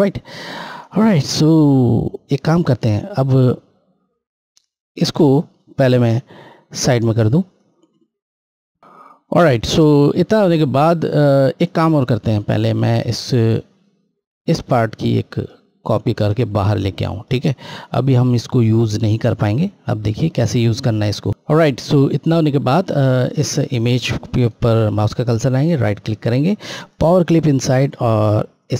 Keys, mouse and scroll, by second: 0.8 click, 2.9 scroll, 3.0-4.7 scroll down 1, 7.5 click, 11.5 click, 12.5 click, 15.1 right click, 16.5 click, 23.4 click, 24.4 right click.